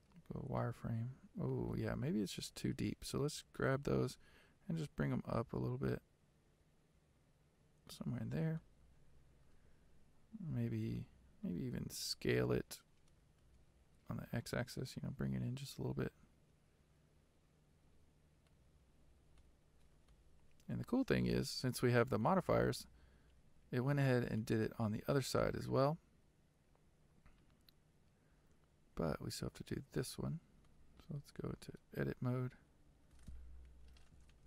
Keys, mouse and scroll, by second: 0.7 z, 1.0-1.8 scroll up 2, 1.8-3.4 shift+middle drag, 3.4 g, 8.7-11.7 shift+middle drag, 11.7-13.3 scroll down 2, 13.3 s, 19.4-21.5 middle drag, 21.5 Tab, 22.3-24.5 middle drag, 24.5 z, 25.5-29.9 middle drag, 29.9 click, 30.8-31.8 middle drag, 31.8 Tab, 33.6 KP_3.